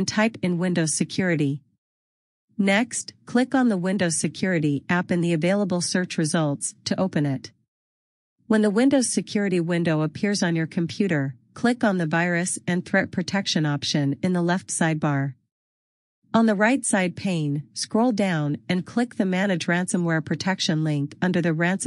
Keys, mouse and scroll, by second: 12.8 click, 14.9 scroll down 1, 21.1 click.